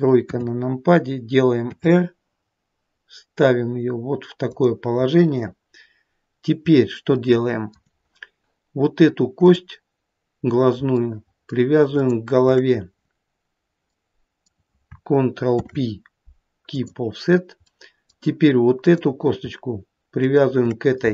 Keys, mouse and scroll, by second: 0.4 KP_3, 1.8 r, 5.3 middle click, 6.3 middle click, 6.9-9.3 scroll up 2, 7.3 middle click, 9.6 click, 10.3-10.8 scroll down 1, 11.2 shift+middle click, 12.1 shift+click, 14.1 middle click, 15.7 ctrl+p, 17.9 middle click, 19.0 click, 20.3 shift+click.